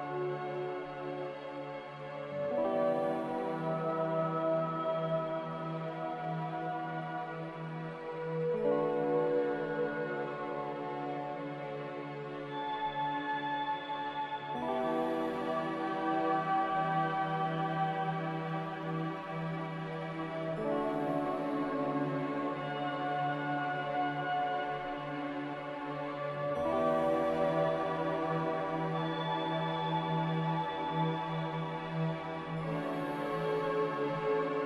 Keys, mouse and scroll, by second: 4.2 Return, 6.1-7.0 typing, 11.5 z, 13.8-14.7 typing, 24.1 q, 25.0 q, 28.7 z, 30.3-31.1 typing.